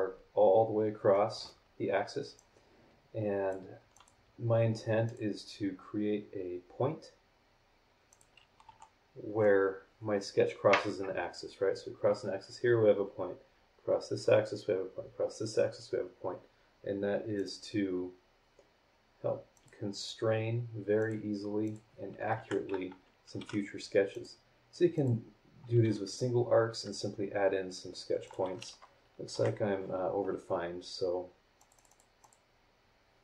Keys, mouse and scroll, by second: 2.4-3.7 drag, 3.9 click, 5.0 click, 8.1 click, 8.6 h, 17.4 click, 19.5 click, 21.0 click, 21.6 click, 22.3 Escape, 23.4 t, 24.1 click, 24.9 click, 26.7 Escape, 28.2 click, 29.3 Delete, 31.6 click, 32.2 click.